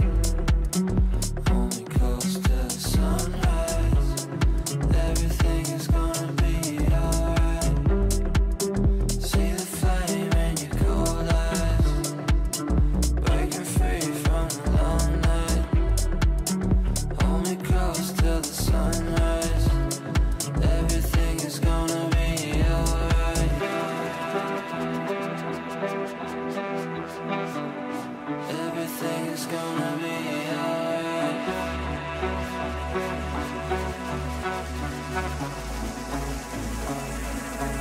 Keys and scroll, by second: 8.8 c, 9.0 e, 11.2 c, 13.5 c, 20.9 c.